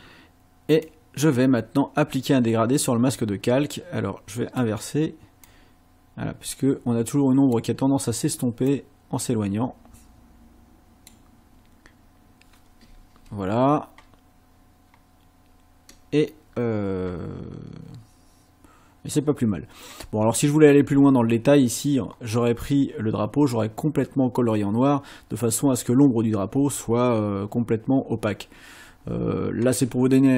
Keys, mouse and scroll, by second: 0.9-4.7 drag, 5.5-7.7 drag, 8.7-11.3 drag, 20.2-20.5 ctrl+scroll up 2, 22.1 scroll up 2.